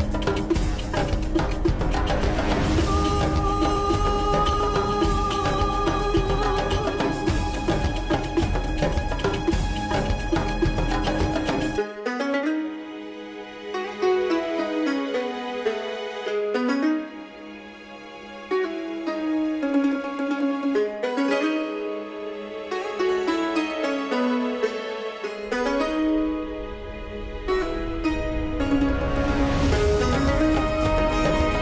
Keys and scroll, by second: 8.8-10.6 typing, 11.0 Return, 20.5 ctrl+c, 22.0 ctrl+c, 23.7 ctrl+v.